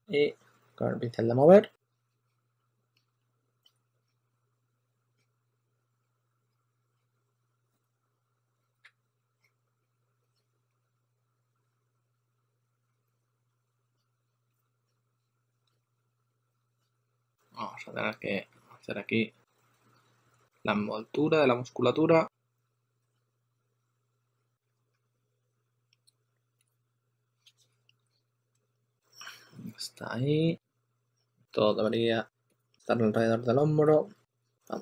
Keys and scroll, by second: 0.0-0.3 typing, 3.0 2, 4.8 2, 6.5 2, 7.0 2, 7.2 2, 9.4 2, 9.7 2, 10.3 2, 10.6 2, 15.7 2, 22.9 s, 24.4-26.0 typing, 28.4 2, 33.8 s.